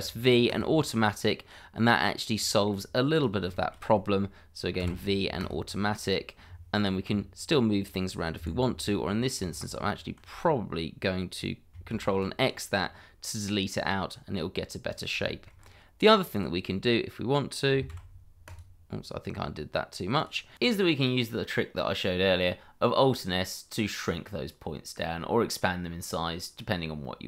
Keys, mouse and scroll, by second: 0.5 click, 1.3 scroll down 1, 2.5 shift+middle click, 3.1 click, 3.5 shift+middle click, 4.8 v, 7.0 g, 8.3 Escape, 9.6 ctrl+z, 11.9 ctrl+x, 12.8 scroll down 1, 14.1 scroll up 1, 14.9 click, 15.3 shift+middle click, 15.5 scroll up 1, 16.3 click, 17.9 v, 18.4 click, 19.4 scroll down 1, 20.1 click, 20.5 double click, 21.2 scroll up 1, 23.5 alt+s.